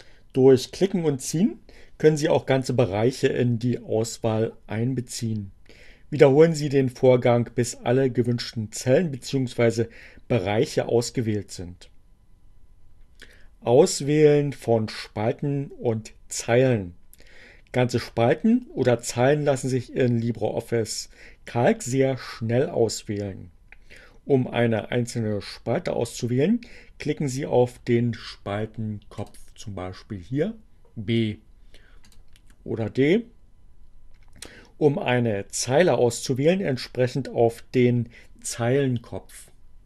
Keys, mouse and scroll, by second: 29.1 click, 32.0 click, 39.4 click.